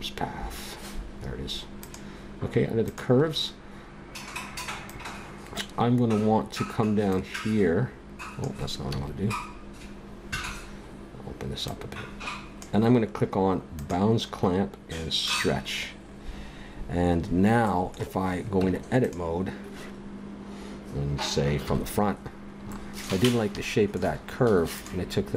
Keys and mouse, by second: 1.8-4.6 drag, 7.7-8.9 drag, 11.6-13.7 drag, 13.8-16.8 drag, 17.2-18.4 drag, 18.5 Tab, 21.6 KP_1, 24.8 click.